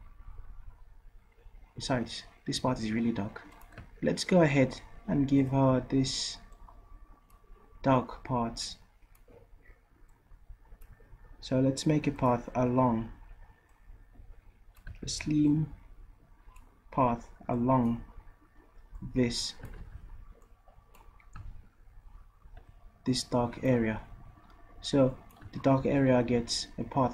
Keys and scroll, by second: 15.1 ctrl+z, 19.8 ctrl+z, 22.5 ctrl+z.